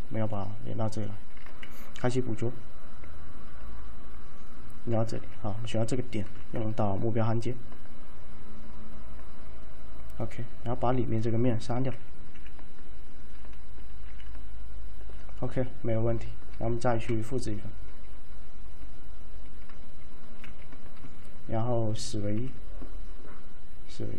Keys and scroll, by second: 1.7 !, 5.3 1, 6.7 alt+m, 12.0-14.1 typing, 17.0 t, 20.6 shift+1, 22.5 alt+z.